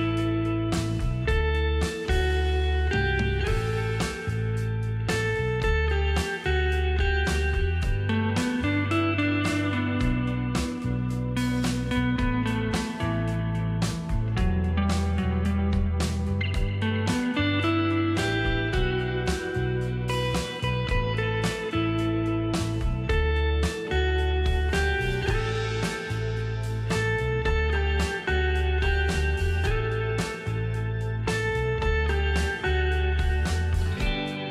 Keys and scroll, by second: 1.6 space, 3.7 ctrl+shift+], 9.0 space, 19.7 space, 25.5 space, 31.7 space.